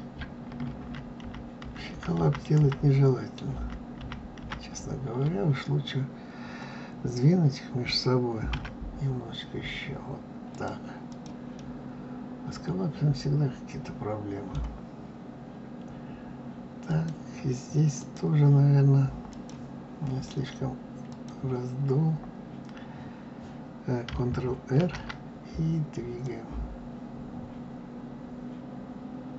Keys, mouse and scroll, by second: 0.8 ctrl+z, 1.2 ctrl+z, 1.6 ctrl+z, 1.9 ctrl+z, 2.1 ctrl+z, 2.5 ctrl+z, 3.5 ctrl+z, 4.0 ctrl+z, 4.4 ctrl+z, 8.5 s, 11.1 click, 11.5-14.5 middle drag, 16.8 click, 18.0 click, 19.3 click, 21.1 click, 24.7 ctrl+r.